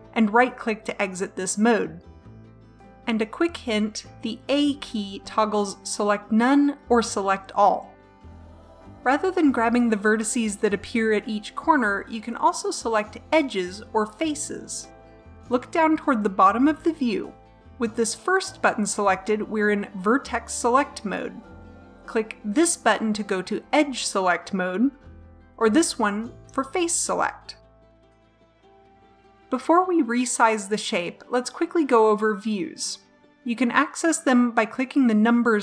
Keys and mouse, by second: 4.7 a, 22.6-24.4 drag, 25.0 click, 26.5 click, 28.6 a.